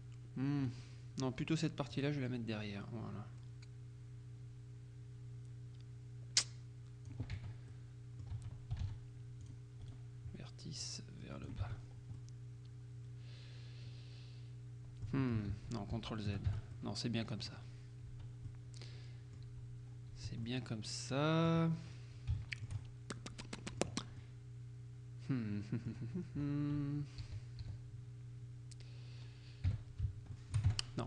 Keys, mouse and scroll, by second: 0.7 right click, 2.0-7.7 drag, 7.4 Tab, 7.8 click, 8.0 middle click, 8.4 Tab, 9.5 click, 9.9 right click, 10.9-11.9 drag, 11.7 Tab, 11.9-12.3 scroll down 1, 12.3 middle click, 15.6 ctrl+z, 16.6 ctrl+Tab, 16.8-18.1 ctrl+drag, 18.2 Tab, 18.5-19.9 drag, 19.5 z, 19.9-20.5 scroll up 1, 20.2 z, 20.5-21.8 drag, 21.8-22.3 scroll up 1, 22.4 shift+click, 23.1 shift+middle click, 24.3 click, 26.3-26.9 scroll down 1, 27.3 z, 29.7 KP_3, 30.4 shift+click, 30.7 shift+Tab.